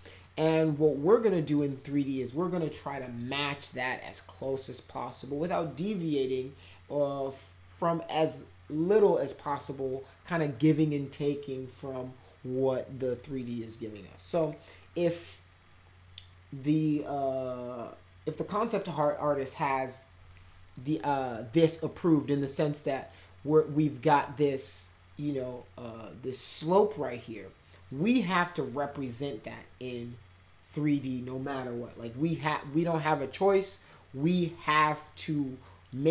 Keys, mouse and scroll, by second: 0.2 middle click, 1.2 middle click, 1.9 middle click, 20.7 middle click, 27.8 middle click.